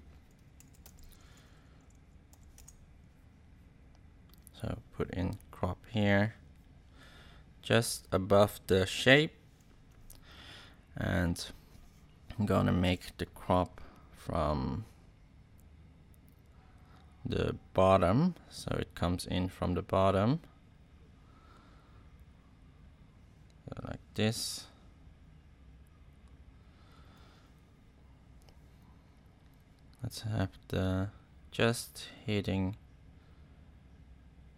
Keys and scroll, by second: 0.3-2.3 typing, 2.5 Return.